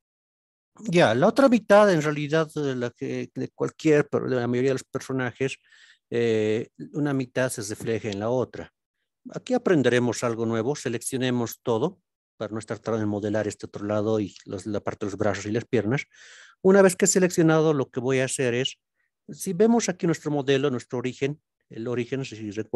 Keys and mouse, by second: 3.1 alt+z, 18.8 click.